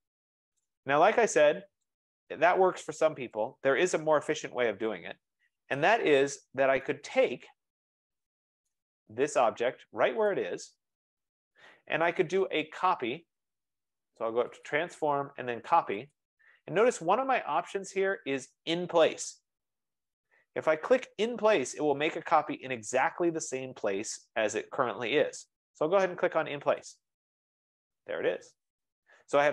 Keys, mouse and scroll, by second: 0.5 scroll, 0.7 right click, 1.9 click, 2.6-2.9 scroll up 8, 3.6 shift+click, 4.2-5.1 typing, 5.9 scroll, 7.0 right click, 7.4-8.0 scroll, 8.8 right click, 10.4 click, 14.8 click, 16.1 click, 16.3-16.6 scroll down 1, 27.2-29.5 drag.